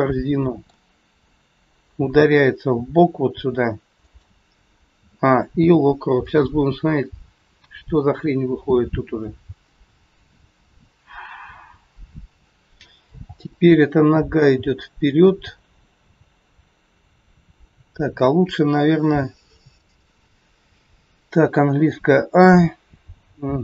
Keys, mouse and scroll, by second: 1.9 g, 5.0 a, 5.5 i, 7.3 scroll down 3, 9.1 click, 12.7 scroll up 4, 13.1 g, 17.2 scroll down 1, 22.3 a.